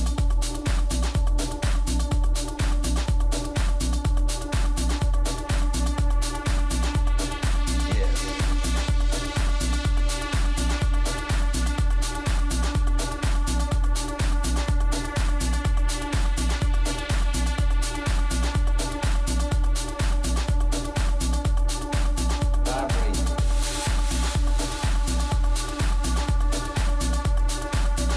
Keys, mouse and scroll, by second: 0.5 middle click, 0.8-6.8 middle drag, 7.1 middle click, 8.4 Tab, 9.5 a, 9.9 a, 13.1 ctrl+r, 15.9 a, 17.9 ctrl+r, 19.8 a, 20.1-21.4 middle drag, 22.9 right click, 23.9-28.1 middle drag.